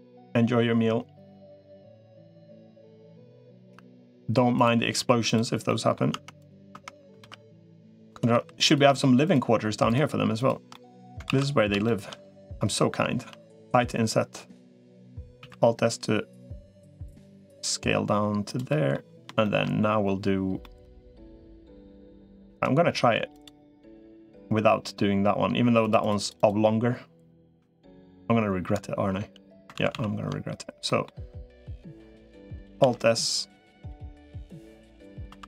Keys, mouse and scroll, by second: 1.8 g, 5.5 middle click, 6.0 Tab, 6.6 Tab, 7.0 ctrl+r, 8.2 3, 10.2 shift+click, 10.5 middle click, 11.2 ctrl+s, 11.6 shift+middle click, 13.0 i, 15.2 alt+s, 18.5 middle click, 19.2 shift+middle click, 20.4 middle click, 22.4-24.2 right drag, 25.8 click, 29.6 ctrl+z, 29.8 ctrl+z, 30.7 middle click, 32.6 alt+s, 33.6 click, 34.7 middle click, 35.2 2.